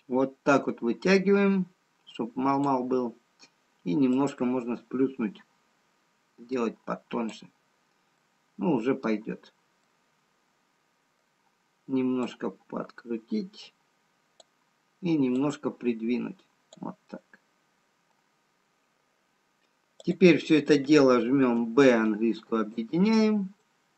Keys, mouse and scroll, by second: 5.2 click, 8.3 middle click, 10.1 middle click, 13.1 click, 17.5 middle click, 20.6-21.6 scroll down 2, 21.6 b, 23.5 middle click.